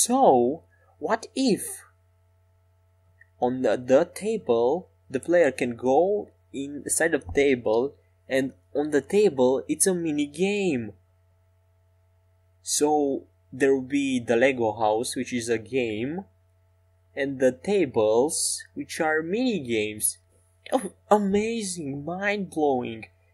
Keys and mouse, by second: 7.7 middle click, 9.9-12.3 right drag, 12.3-13.5 middle drag, 14.9-16.5 middle drag, 20.0-23.2 middle drag, 21.8 Tab.